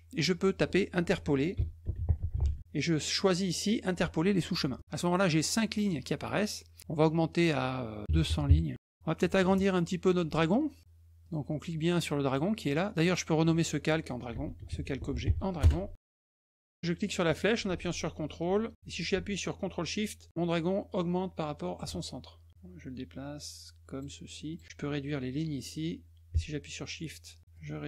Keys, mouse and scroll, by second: 0.2 click, 1.2-2.9 typing, 4.7 click, 7.3 click, 10.3 click, 11.2 click, 12.2 click, 12.9 click, 13.0 click, 14.0-15.7 typing, 17.1-21.8 ctrl+drag, 22.5-24.0 drag, 24.5 click, 25.4-27.4 drag, 27.5-27.8 drag.